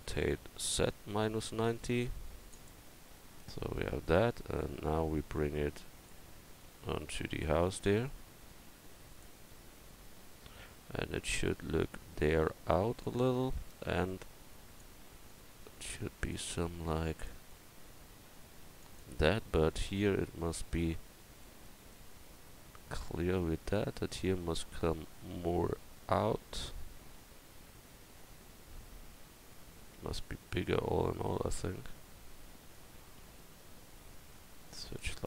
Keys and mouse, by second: 0.0 r, 5.4 click, 5.4 right click, 6.1-10.3 drag, 7.7 right click, 11.2-13.0 middle drag, 13.3-14.5 middle drag, 14.5-20.8 drag, 20.8-22.1 middle drag, 33.2 s.